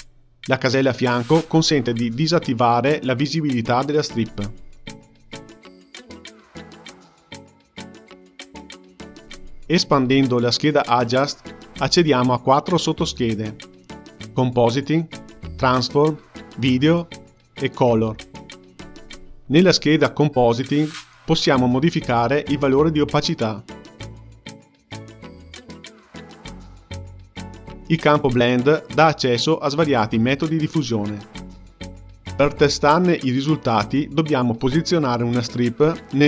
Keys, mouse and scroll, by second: 2.1-3.0 ctrl+middle drag, 3.0-4.7 drag, 5.5 click, 6.5 click, 11.0-22.1 drag, 23.4-31.6 drag, 34.4 g, 35.8 shift+a.